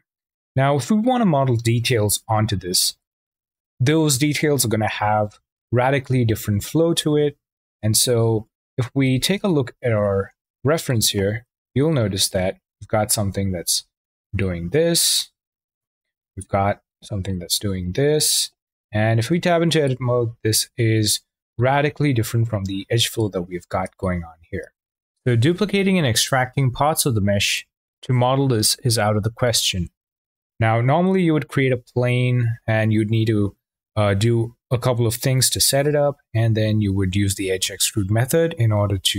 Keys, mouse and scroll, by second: 8.4 Tab, 9.0 `, 11.9-18.8 drag, 18.8 Tab, 24.6-26.9 shift+middle drag.